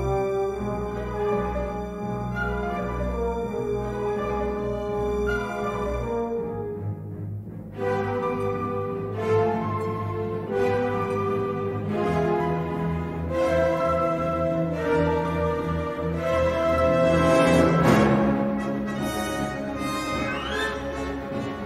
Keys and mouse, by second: 0.2 g, 2.3 3, 3.0 shift+click, 3.9 click, 5.0 click, 6.2 s, 6.8 g, 9.2 middle click, 11.6 alt+shift+click, 13.3 alt+shift+click, 15.1 click, 15.7 s, 16.3 g, 18.6 middle click, 20.0 3, 20.3 middle click.